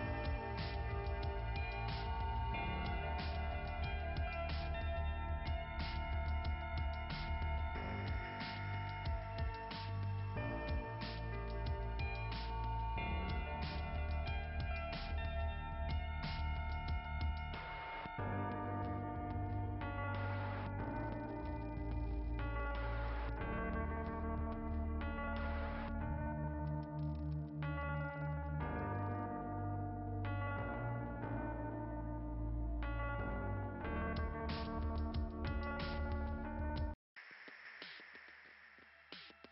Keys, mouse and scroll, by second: 10.1 click, 10.3 click, 10.6 click, 10.9 click, 15.7 click, 16.0 click, 16.4 click, 16.5 click, 17.3 click, 17.6 click, 18.4 click, 18.7 click, 31.8 click, 32.2 click, 32.7 click, 33.0 click, 33.4 click, 33.7 click, 33.8 click.